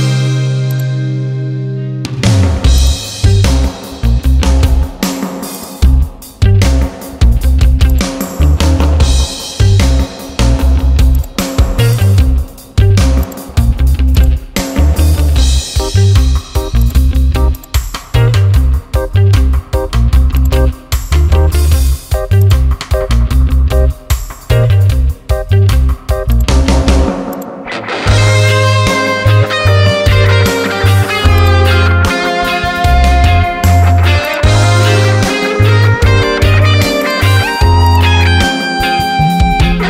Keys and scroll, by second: 3.9 ctrl+z, 16.2 space, 24.2 ctrl+alt+z.